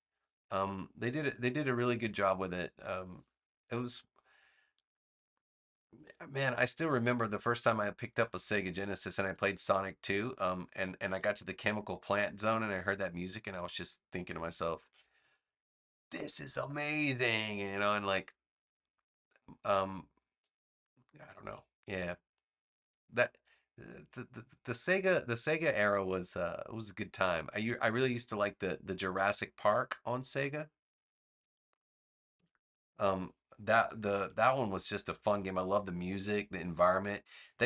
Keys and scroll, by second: 8.4 a, 14.7 super+z, 32.3 v, 33.9 super+c, 35.6 a.